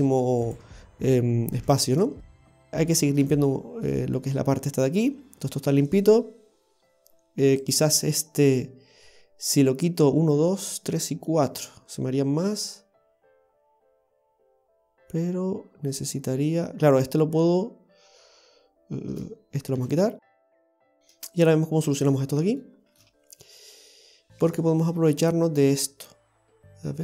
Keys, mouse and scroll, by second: 0.5 right click, 1.6 x, 2.4-2.7 scroll down 2, 2.7 shift+middle click, 2.7 scroll up 2, 3.4 middle click, 7.7 right click, 21.0 scroll up 1, 22.2 middle click, 22.6 shift+middle click, 23.2-23.9 scroll down 1.